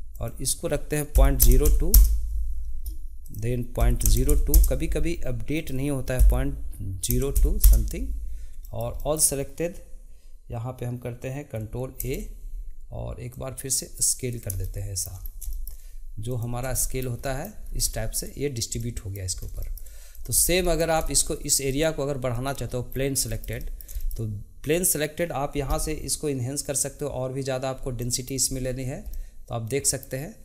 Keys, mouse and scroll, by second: 0.1-3.1 drag, 3.2-8.6 drag, 8.6-12.0 shift+middle drag, 12.0 ctrl+a, 14.6 shift+middle drag, 16.4 click, 16.7-17.8 shift+middle drag, 17.8 scroll up 2, 17.9-19.4 shift+middle drag, 19.4 scroll down 1, 19.6 shift+middle click, 20.1 click, 20.4 scroll down 1, 20.6-21.7 middle drag, 21.7 click, 22.3 click, 22.9-23.3 scroll down 1, 23.3-24.7 shift+middle drag, 24.7 click, 26.6-28.0 drag, 28.0-28.5 middle drag, 28.5-29.1 scroll up 5, 29.1-30.4 middle drag.